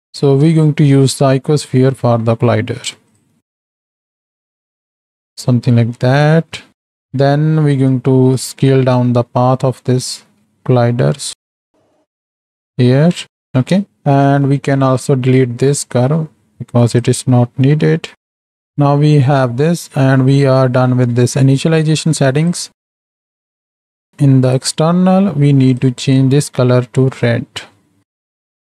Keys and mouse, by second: 0.6 shift+middle click, 2.0 Tab, 2.8 x, 3.6 shift+a, 4.2 s, 6.9 Tab, 10.1 s, 13.1 Tab, 13.3 Tab, 13.8 ctrl+space, 14.2 middle drag, 15.6 click, 16.7 x, 22.4 click, 23.1 middle click, 24.4 click.